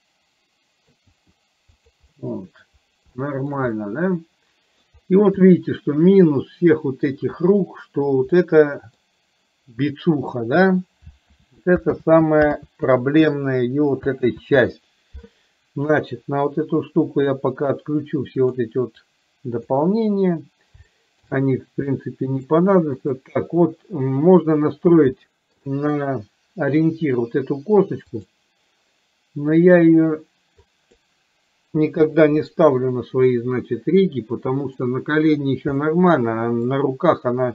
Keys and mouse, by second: 1.3 r, 2.3 middle click, 3.3-3.7 middle drag, 3.8-5.0 middle drag, 5.5-7.3 middle drag, 8.5-9.2 middle drag, 11.4 ctrl+z, 12.0 ctrl+z, 12.8 ctrl+z, 14.3 ctrl+z, 18.5 click, 19.3 click, 21.0 shift+middle click, 22.0 middle click, 23.2 click, 25.4 shift+middle click, 28.3-30.2 drag, 30.7 click, 32.0 Delete, 34.2 middle click, 35.8-36.8 middle drag.